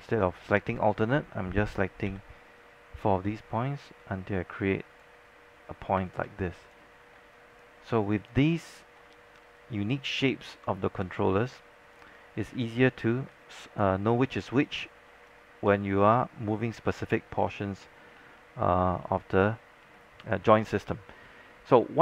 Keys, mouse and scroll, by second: 0.7-1.1 scroll down 1, 1.8-2.2 scroll up 1, 1.8 e, 2.2 r, 2.7-7.2 drag, 6.1 space, 7.4 alt+click, 7.8 scroll up 1, 8.0 alt+click, 8.5 alt+middle click, 9.7 right click, 11.6 click, 12.4 scroll down 1, 12.6 alt+click, 13.2 scroll up 1, 13.4 alt+click, 14.1 scroll up 1, 14.7 click, 15.2 scroll down 1, 15.3 alt+click, 15.9 scroll up 1, 16.2 alt+middle click, 17.0 alt+middle click, 17.4 scroll down 1, 17.5 alt+click, 18.5 alt+middle click, 18.6 scroll up 1, 19.0 alt+middle click.